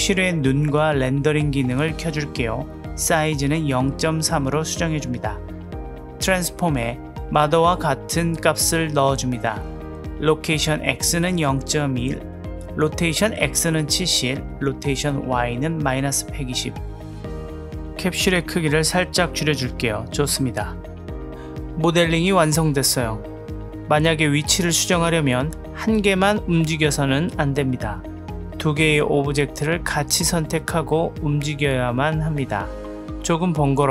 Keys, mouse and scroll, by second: 0.9 click, 1.5 click, 3.2-3.9 middle drag, 4.0 n, 4.6-5.7 drag, 9.8 click, 12.2 click, 14.1-15.1 drag, 15.9-17.1 middle drag, 18.3 click, 18.6 s, 19.7-20.4 middle drag, 21.1-21.8 middle drag, 24.2 click, 24.6-25.0 middle drag, 26.1-27.3 drag, 28.0 ctrl+z, 28.3-29.0 drag, 30.3 click, 32.4 click, 32.8-33.2 drag.